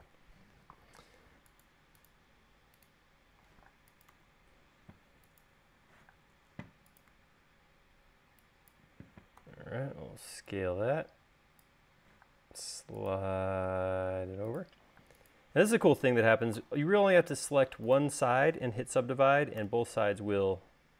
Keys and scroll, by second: 1.1 space, 6.0 m, 9.5 s, 12.3 m, 15.3 space, 19.9 u.